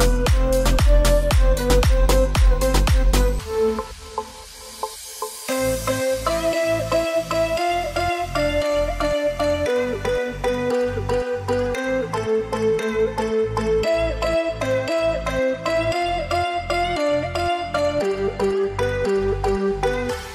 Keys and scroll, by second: 14.8-19.0 typing.